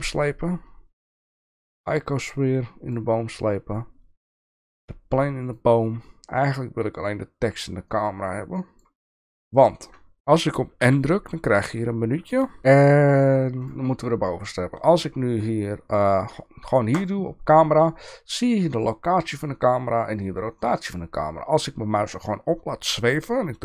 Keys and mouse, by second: 1.8-2.9 drag, 4.8-5.5 drag, 7.9-8.8 drag, 10.8 n, 12.6 alt+a, 13.6 click.